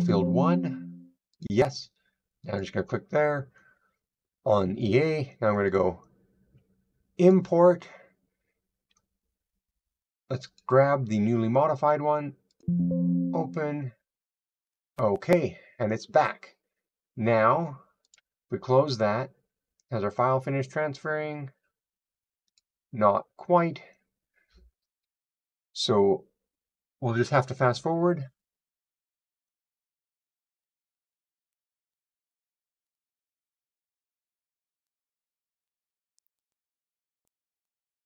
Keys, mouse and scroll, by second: 22.6-27.4 drag.